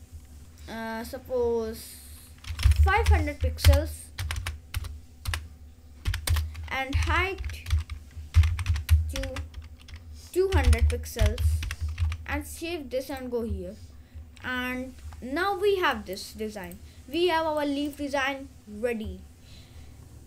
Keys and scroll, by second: 2.3-4.3 typing, 3.8 Return, 6.1-12.2 typing, 6.4 Return.